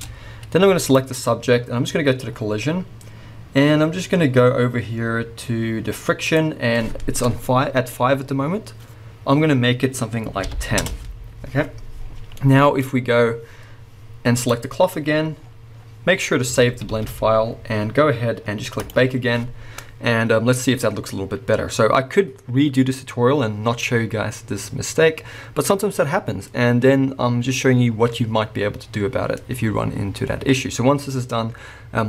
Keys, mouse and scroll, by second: 0.0 Tab, 0.4 scroll down 1, 0.8 click, 2.4-6.3 scroll down 1, 6.3-12.4 drag, 11.0 Return, 12.0-12.4 scroll down 1, 12.4-14.4 middle drag, 12.8 scroll up 1, 14.4 click, 15.4-16.7 scroll down 1, 16.7 ctrl+s, 17.4-18.8 scroll down 1, 18.8-32.0 drag.